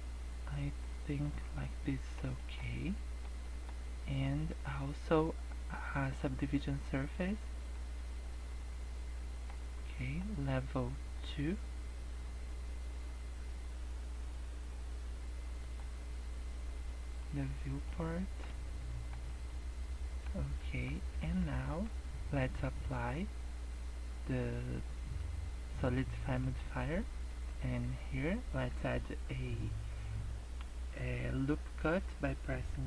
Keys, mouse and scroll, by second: 1.6 middle click, 2.3 middle click, 2.7 scroll down 2, 2.8 middle click, 3.4 middle click, 6.0 click, 8.1 scroll up 2, 8.6 middle click, 10.2-10.7 scroll down 4, 15.5 click, 17.3 middle click, 17.8 middle click, 18.5 scroll down 4, 18.7 middle click, 19.1 scroll up 3, 19.4 middle click, 20.6 Tab, 21.2 shift+middle click, 21.8 Tab, 22.6-23.5 scroll up 3, 26.4 click, 27.2 scroll up 2, 27.2 Tab.